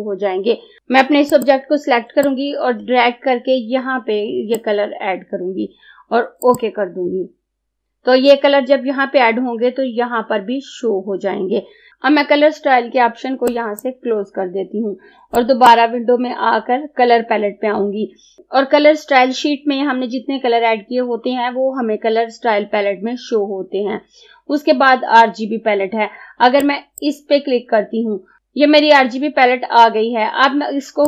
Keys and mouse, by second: 0.8 Delete, 1.4-6.4 drag, 13.6-26.7 drag, 26.7-28.4 drag.